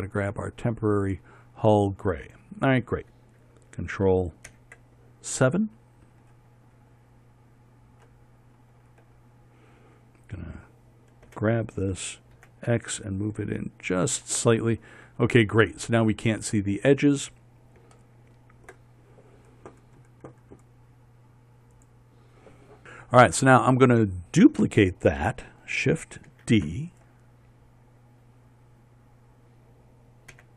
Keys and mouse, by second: 5.2 ctrl+KP_7, 7.3 middle click, 7.6 middle click, 9.1 middle click, 12.0 g, 23.7-27.7 middle drag.